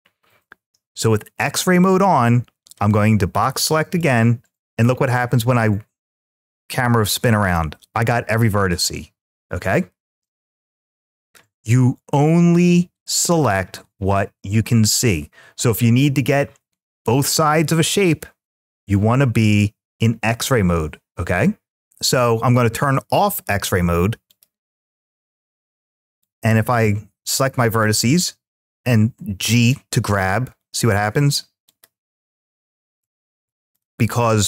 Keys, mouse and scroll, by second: 2.1-3.8 drag, 4.9-8.5 middle drag, 10.1 `, 24.1 click, 26.0-27.1 drag, 29.0 g, 31.5 click, 32.6 ctrl+z, 34.0 middle click.